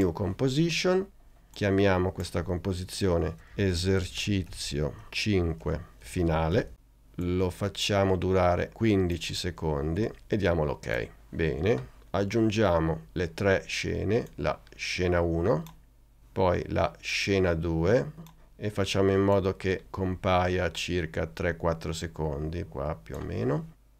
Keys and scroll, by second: 3.1-7.1 typing, 9.1 l.